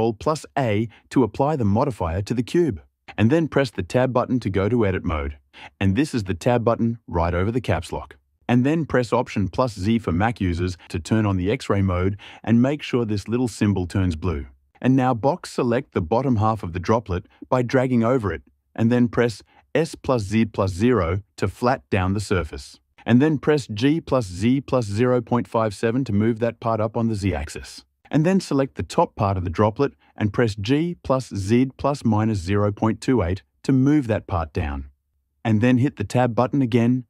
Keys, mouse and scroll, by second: 0.9 ctrl+a, 3.4 Tab, 10.0 alt+z, 14.8-16.2 drag, 19.1 s, 19.8 z, 20.6 KP_0, 21.8 Return, 23.2-26.1 typing, 27.1 Return, 28.7 click, 30.1-33.1 typing, 31.6 KP_Subtract, 34.3 Return, 35.5 Tab.